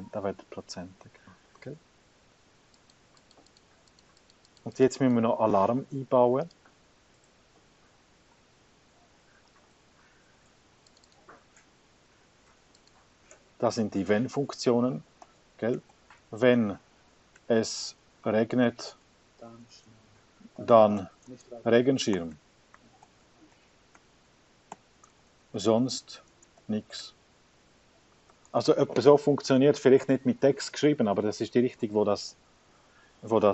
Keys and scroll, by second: 15.5-33.5 typing.